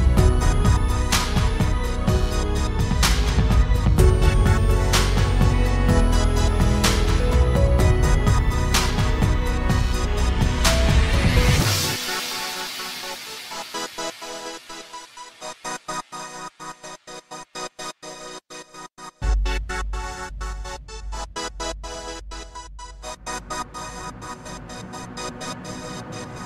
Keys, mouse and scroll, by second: 5.0 ctrl+alt+shift+c, 10.8 KP_3, 12.2 KP_5, 17.9 KP_5, 22.3 KP_5.